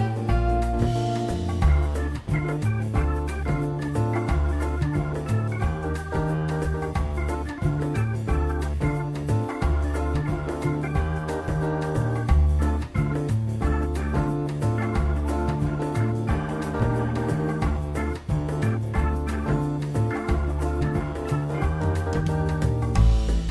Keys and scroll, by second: 9.5 BackSpace, 9.9 2, 10.9 4, 11.9 w, 13.9 Delete, 20.6 e, 21.5 Return.